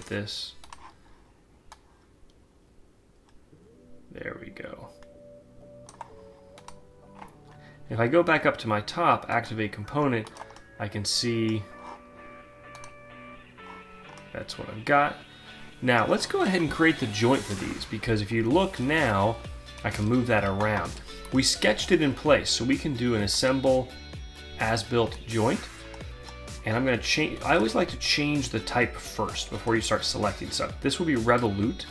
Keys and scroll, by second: 19.9 ctrl+z.